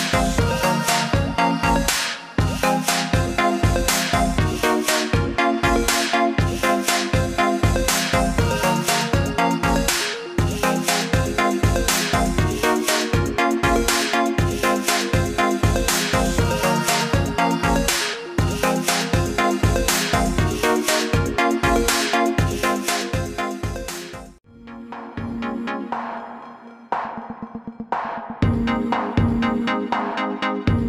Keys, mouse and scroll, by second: 4.8 click, 6.1 click, 12.7 click, 17.2 click, 19.0 ctrl+z, 20.0 right click, 22.8 click.